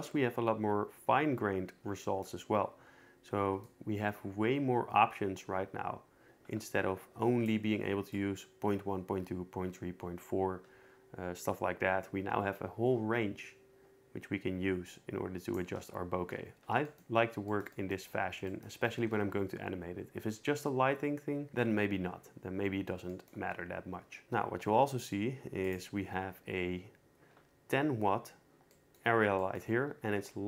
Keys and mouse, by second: 3.6-6.9 shift+drag, 6.9 middle click, 7.3 click, 7.3 middle click, 7.4 click, 8.1-14.8 shift+drag, 14.8 shift+middle click, 15.3 shift+click, 19.2 ctrl+s, 24.2 a, 25.0-25.8 drag, 30.0 g.